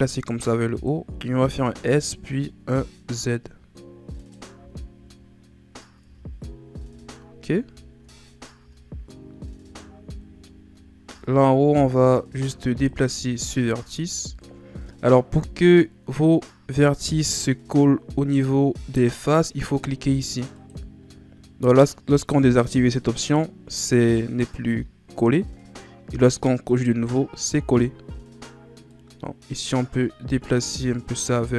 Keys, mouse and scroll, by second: 1.5 s, 6.0 Tab, 6.5-7.0 scroll down 2, 7.0-7.8 scroll up 7, 7.8-8.4 scroll up 2, 8.6 Tab, 9.6 Tab, 10.4-11.2 scroll up 3, 11.2 Tab, 11.6 z, 12.2 z, 12.9 alt+right click, 14.0 Tab, 17.0 Tab, 20.5 click, 26.7 click, 28.9-31.5 drag.